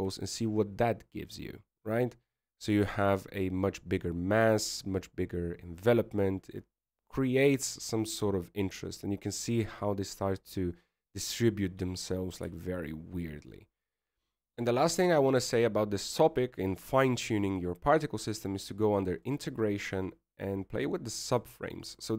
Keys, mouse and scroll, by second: 0.2 click, 14.5 click, 15.5-17.0 scroll down 1, 20.9 click, 21.5-22.1 scroll down 1.